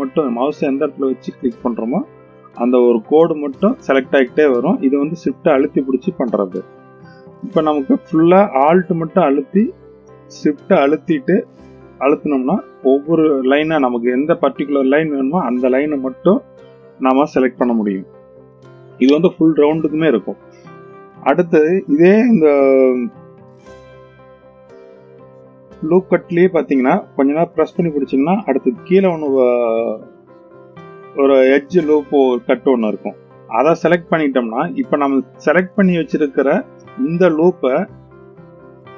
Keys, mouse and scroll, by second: 1.2 shift+click, 2.1 shift+click, 3.4 shift+click, 5.3 shift+click, 7.1 click, 9.3 alt+click, 11.2 alt+shift+click, 12.2 alt+shift+click, 13.2 alt+shift+click, 14.2 alt+shift+click, 22.2 scroll down 1, 23.4-24.0 scroll up 2, 26.6-33.6 drag, 38.6-38.9 drag.